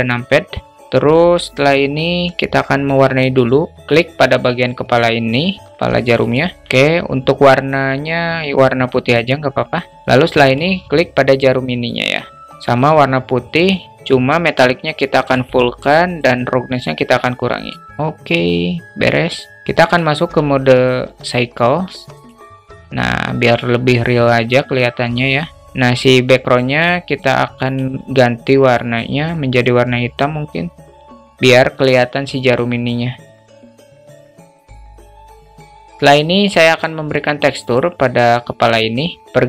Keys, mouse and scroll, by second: 2.8 click, 5.7 click, 11.4-11.9 drag, 14.2 click, 15.7-17.1 drag, 21.7-22.7 drag, 26.1 click, 27.1 click, 34.1-35.5 drag, 37.2 click.